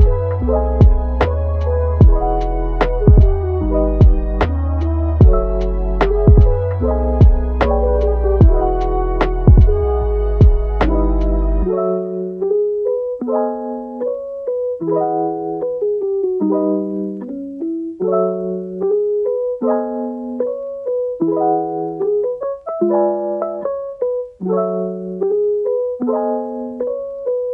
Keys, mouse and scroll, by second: 0.5 click, 1.0 click, 1.8 g, 4.7 click, 5.3 click, 5.5 g, 7.9 click, 8.4 click, 8.7 g, 9.7 click, 10.0 g, 11.0 click, 11.2 g, 12.1 click, 12.9 click, 13.1 g, 13.8 click, 14.0 g, 14.8 click, 15.0 g, 16.1 click, 16.3 g, 19.3 click, 19.6 g, 20.3 click, 20.6 g, 21.5 click, 21.7 g, 22.7 click, 22.9 g, 23.5 click, 23.7 g, 25.0 click, 25.7 click, 26.0 g, 27.2 click, 27.4 g.